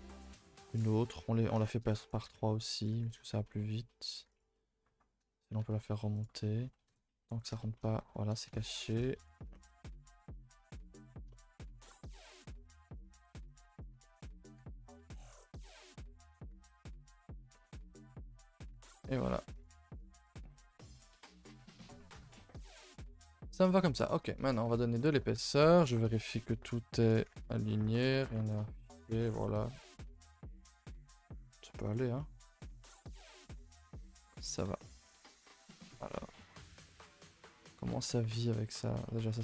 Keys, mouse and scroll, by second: 0.2 middle click, 1.0 e, 1.6 shift+middle click, 2.2 r, 2.9 g, 4.5-5.6 middle drag, 5.6 g, 6.3 middle click, 6.8 KP_0, 7.6 shift+middle click, 7.8 scroll up 1, 8.0 z, 8.6 middle click, 9.2-10.2 scroll up 7, 9.5 shift+middle click, 10.2 scroll down 1, 10.3-12.2 middle drag, 12.2 r, 12.7 g, 13.1 1, 13.4 click, 13.7 shift+click, 14.0 middle click, 14.5 g, 16.7 ctrl+r, 17.1 middle click, 17.7 g, 18.7 Tab, 19.5 click, 19.7 a, 19.9 a, 20.2 ctrl+s, 20.3-21.3 middle drag, 21.3 scroll up 2, 21.6 Tab, 21.9 Tab, 22.2 a, 22.3 a, 22.4-22.7 middle drag, 22.7 ctrl+s, 22.9 scroll down 1, 23.0-24.0 middle drag, 24.0 scroll up 1, 24.1 a, 24.2 a, 24.4-24.7 middle drag, 24.7 ctrl+s, 24.8 scroll down 2, 24.9-25.3 middle drag, 25.3 KP_0, 26.0-26.4 scroll down 2, 27.5-28.3 scroll down 3, 27.7 shift+middle drag, 28.3-28.7 shift+middle drag, 28.7 scroll down 2, 28.8 a, 28.9 a, 29.2 ctrl+s, 29.4-29.7 middle drag, 29.7 scroll up 1, 30.0-31.8 shift+middle drag, 31.8 scroll up 3, 32.3-33.6 middle drag, 33.7 middle click, 34.3 click, 34.6 h, 34.8 middle click, 34.9-35.3 scroll up 1, 35.3 click, 35.4 Tab, 35.6 shift+middle click, 36.0 Tab, 36.1 click, 36.3 Tab, 36.4 scroll up 4, 36.6 a, 36.8 a, 36.8-38.0 middle drag, 38.0-38.4 scroll up 2, 38.4 click, 39.0 middle click.